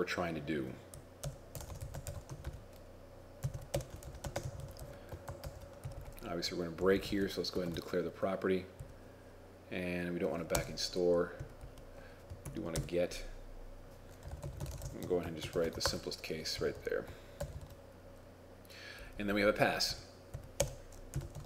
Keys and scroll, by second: 1.9 shift+i, 3.8-5.2 typing, 5.5 ctrl+shift+s, 12.5 shift+End, 15.6 ctrl+shift+s, 15.9 ctrl+Tab, 17.4 ctrl+r, 17.6 ctrl+r.